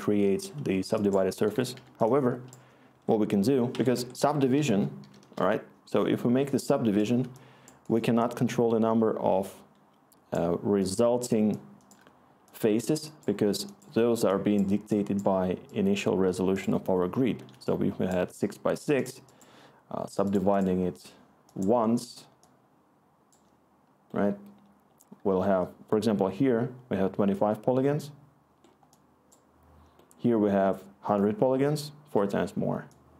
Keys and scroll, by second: 1.7 Delete, 2.9 Tab, 3.7 Escape, 3.9 Tab, 4.1-5.5 typing, 7.1 typing.